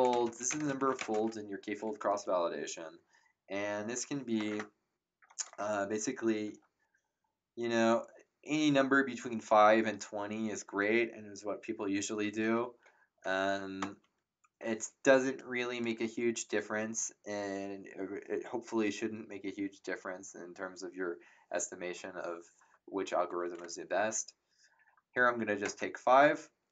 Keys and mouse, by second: 0.0-1.4 typing, 13.8 shift+5, 25.6 ctrl+Return.